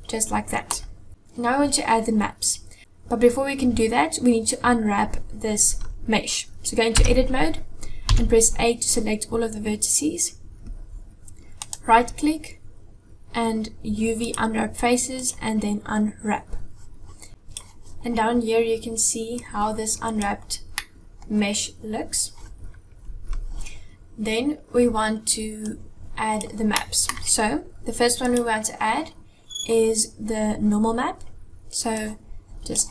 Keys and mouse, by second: 6.6 Tab, 7.9 a, 11.5-15.3 right drag, 17.3 click, 19.3 click, 20.7 middle click, 25.4 click, 26.4 middle click.